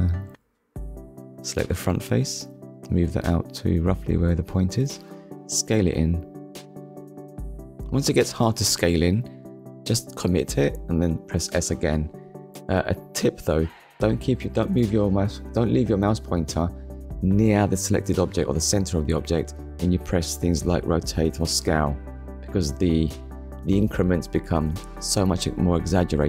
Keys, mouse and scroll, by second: 0.3 click, 1.6 click, 2.5 click, 6.4 click, 11.2 click, 12.9 click, 13.4 scroll down 1, 13.9 middle click, 16.9-17.3 scroll down 1, 17.6 KP_1, 19.1 click, 19.9-20.4 scroll up 2, 21.3 click, 25.7 click.